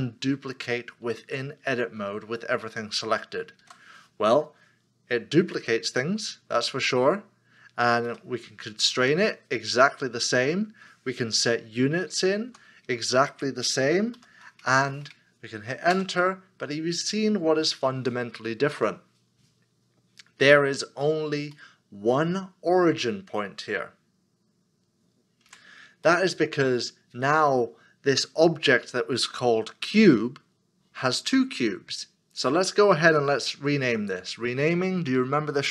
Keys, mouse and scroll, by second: 3.6 shift+d, 8.1 x, 12.5 x, 12.5 5, 14.1 -, 15.9 Return, 21.5 Return, 21.6 middle click, 25.5 Tab, 26.3 middle click, 27.2 scroll down 1.